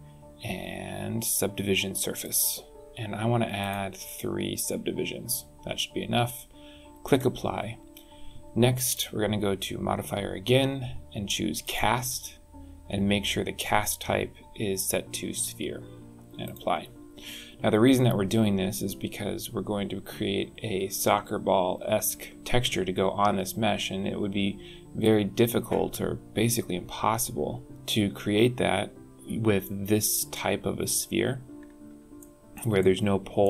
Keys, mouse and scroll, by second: 3.6 click, 4.1 click, 7.1 click, 8.9 click, 16.4 click, 29.6 middle click, 30.8-31.7 scroll up 7, 32.2 shift+middle click, 32.8 middle click.